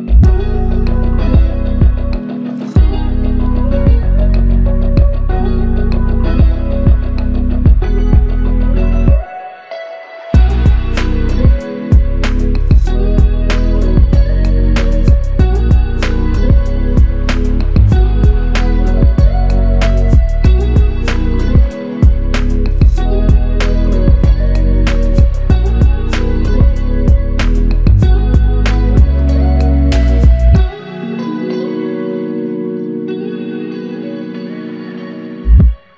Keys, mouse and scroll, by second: 3.1 alt+click, 5.4 double click, 9.3 alt+click, 12.5 double click, 16.3 alt+click, 27.5 shift+click, 28.9 shift+click.